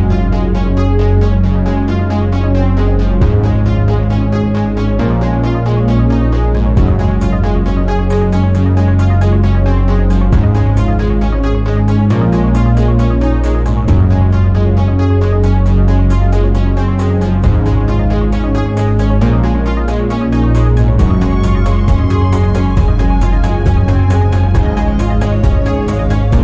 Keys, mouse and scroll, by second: 0.3 KP_1, 1.0 scroll up 2, 1.7 ctrl+x, 2.6 ctrl+z, 3.5 2, 4.2 ctrl+x, 4.6-5.2 scroll down 1, 5.2 alt+z, 6.3 z, 7.7 z, 9.7 click, 10.4 alt+z, 11.3 1, 11.6 click, 12.5 click, 15.4 Tab, 15.6 click, 15.9-16.3 scroll down 5, 16.3 click, 18.4 alt+z, 18.7 drag, 19.0 click, 19.7 click, 20.3-22.3 drag, 24.3 scroll up 5, 25.4 /, 25.9-26.4 scroll up 7.